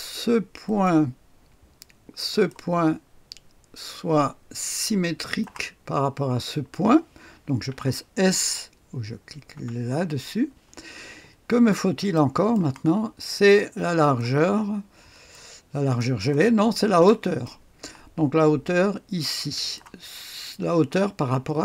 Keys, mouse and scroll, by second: 0.6 click, 2.2 click, 5.1 click, 9.5 s, 11.5-12.1 scroll up 1, 12.1 click, 13.5 click, 15.2 click, 16.4-17.4 scroll down 1, 17.0 click, 17.4 right click, 19.5 click.